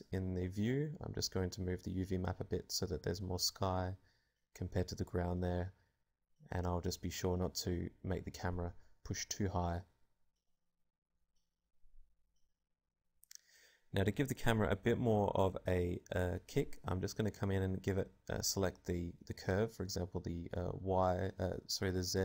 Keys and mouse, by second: 1.4 Tab, 2.2 a, 2.5 click, 2.9 middle click, 3.5 middle click, 3.5 g, 3.9 click, 4.6 g, 5.1 g, 5.8 Tab, 6.1 KP_0, 6.7 alt+a, 7.8 alt+a, 7.9-9.6 drag, 13.4 click, 14.2 right click, 15.1 alt+a, 16.8 alt+a, 16.9 click, 17.4-19.3 drag, 20.0-21.9 drag.